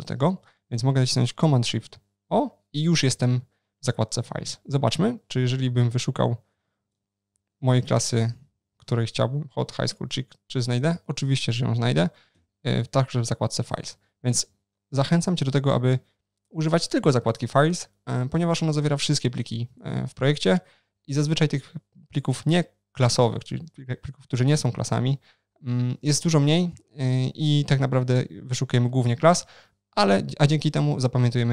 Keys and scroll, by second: 1.8 shift+super+o, 14.5 shift+super+o.